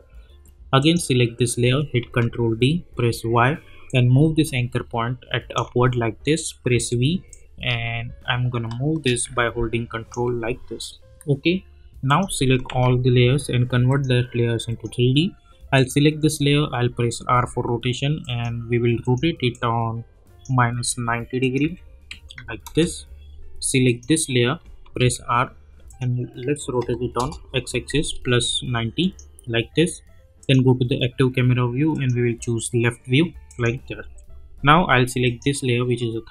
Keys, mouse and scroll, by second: 2.0 ctrl+d, 3.1 y, 4.2-5.7 ctrl+drag, 6.7 v, 7.6-10.4 shift+drag, 12.7 ctrl+a, 13.9 click, 17.2 r, 18.2-21.4 drag, 21.6 -, 22.6 Return, 23.8 click, 25.0 r, 25.9 click, 27.2 Return, 29.0 click, 34.0 u, 35.2 click.